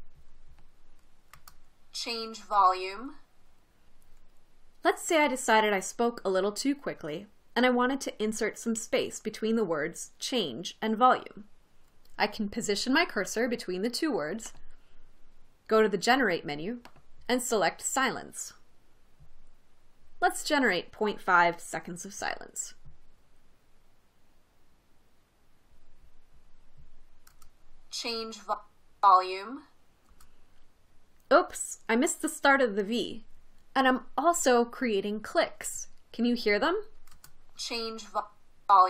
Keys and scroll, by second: 1.6 space, 27.8 space, 30.5 space, 37.6 space.